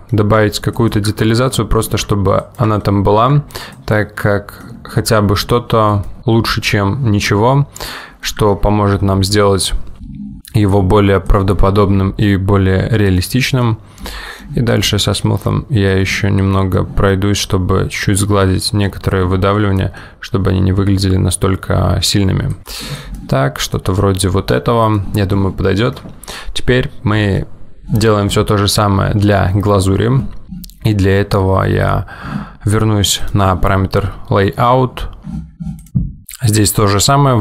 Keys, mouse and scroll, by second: 33.3 click, 36.2 click.